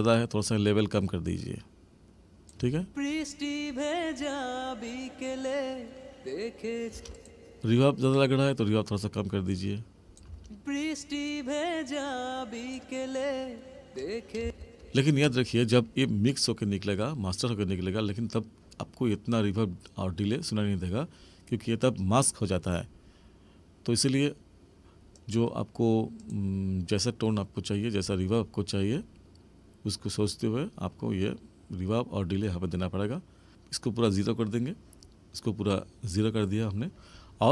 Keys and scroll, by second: 2.6 space, 6.9 space, 10.3 space, 14.4 space.